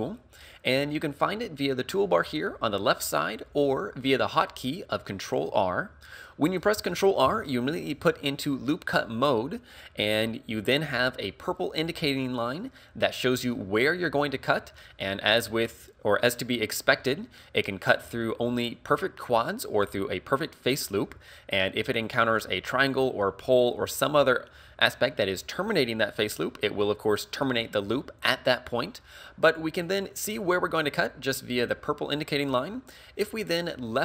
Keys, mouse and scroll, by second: 3.6 click, 7.3 ctrl+r.